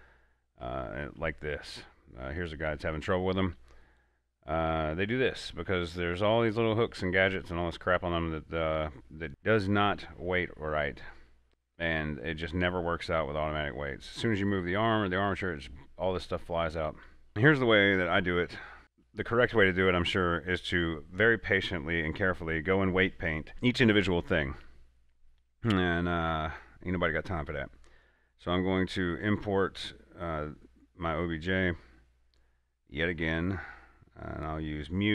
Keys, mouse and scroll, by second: 0.9 alt+Tab, 2.3 scroll down 1, 4.4 scroll up 1, 4.9 typing, 6.2-6.6 typing, 8.5 scroll down 1, 9.2 scroll up 1, 9.3 scroll down 1, 11.0 scroll down 1, 11.5 scroll up 1, 14.0 scroll down 1, 17.1 scroll down 1, 17.3-18.8 middle drag, 18.8 click, 19.4 middle click, 19.4 middle click, 20.1-20.6 scroll down 1, 21.0 right click, 26.8 click, 33.5 click, 33.5 click.